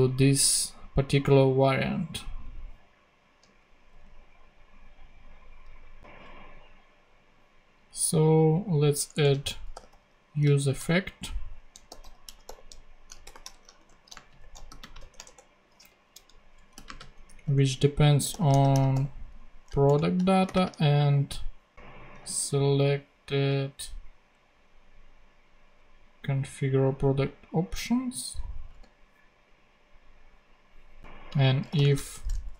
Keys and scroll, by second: 3.9 super+Tab, 9.0 Return, 9.5-10.4 typing, 11.5-15.5 typing, 15.8 Down, 16.1 Left, 16.7-19.4 typing, 19.8 Return, 20.4 ,, 20.5 space, 22.2 super+c, 28.4 Right, 28.7 super+v, 31.5-32.5 typing.